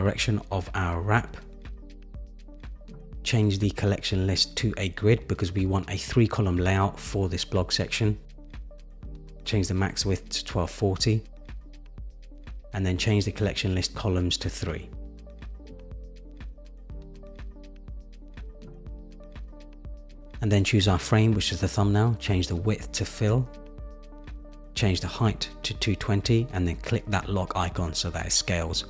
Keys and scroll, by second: 10.0 Return, 12.3 Return, 23.0 Return, 24.8 shift+Down.